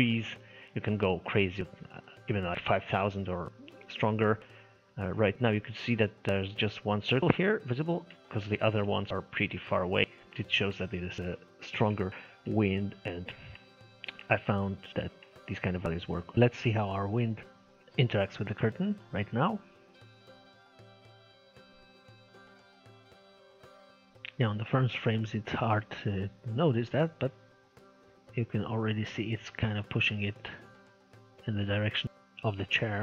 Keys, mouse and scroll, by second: 0.0 scroll up 1, 0.2-3.1 shift+middle drag, 4.2-4.7 scroll down 1, 4.7-5.0 scroll up 3, 5.0 middle click, 6.0-6.4 scroll up 4, 6.4 middle click, 7.3-8.5 scroll down 14, 8.5-8.9 scroll down 1, 8.9-11.2 shift+middle drag, 11.2-11.7 scroll up 3, 11.7 KP_0, 12.1-12.5 scroll up 1, 12.5 middle click, 13.0-13.4 scroll up 6, 13.4-16.3 shift+middle drag, 17.1 middle click, 17.8-18.7 scroll up 1, 18.7-19.8 scroll up 1, 19.8 click.